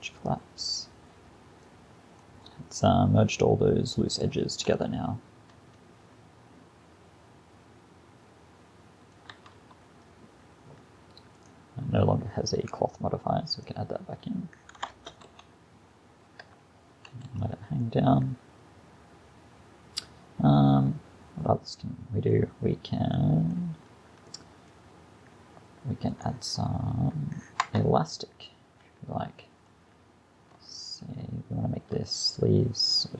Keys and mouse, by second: 1.3-1.6 middle drag, 2.6-3.0 middle drag, 5.8-7.3 middle drag, 9.4 Tab, 14.9 shift+Left, 15.3 alt+a, 17.0 alt+a, 23.2-26.1 middle drag, 26.1-27.7 drag, 27.7 Tab, 29.0 middle click.